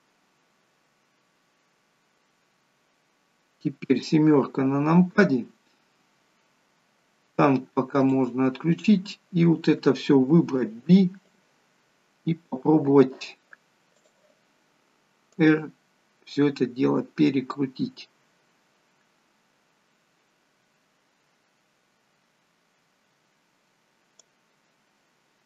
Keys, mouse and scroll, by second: 3.9 KP_7, 5.4-5.7 scroll up 4, 5.9 scroll down 1, 7.0-8.2 scroll down 1, 8.2 click, 8.8 scroll down 3, 10.3 b, 14.1 click, 15.4 click, 25.3 scroll up 2.